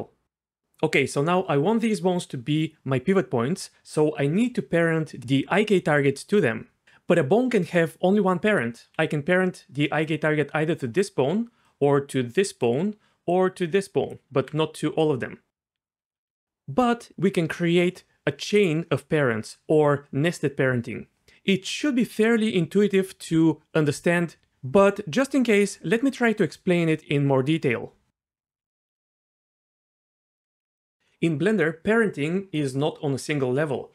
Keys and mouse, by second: 9.1-14.4 d, 10.0 click, 13.3 click, 15.7-16.2 d, 15.8 right click, 28.9 shift+a, 29.8 Tab, 30.4 shift+d, 30.5 click, 30.6 shift+d.